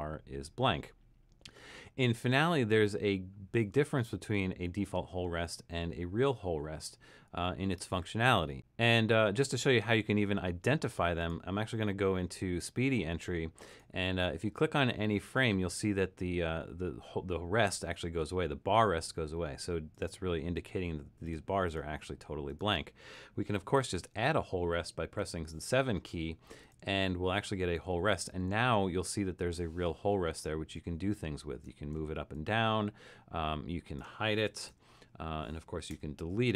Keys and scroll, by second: 25.3 7, 34.7 h, 35.9 BackSpace.